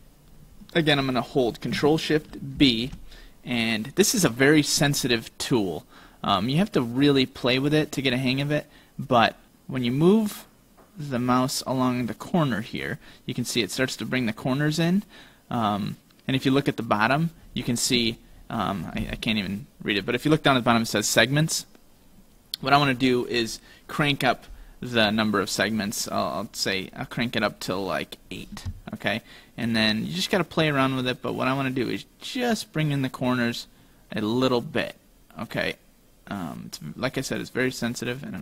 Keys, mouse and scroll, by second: 2.7 ctrl+shift+b.